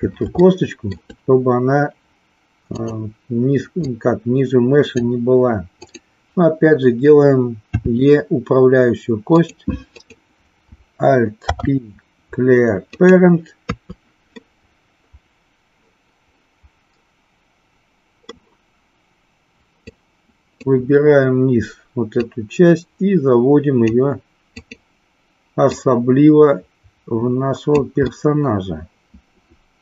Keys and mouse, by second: 0.4 shift+middle click, 2.7 click, 3.9 click, 5.6 click, 7.6 e, 9.4 click, 9.9 click, 11.5 alt+p, 13.5 KP_3, 14.4-18.3 middle drag, 19.8 click, 22.2-23.9 drag, 24.4 click, 25.7-27.7 drag, 28.0-29.8 middle drag.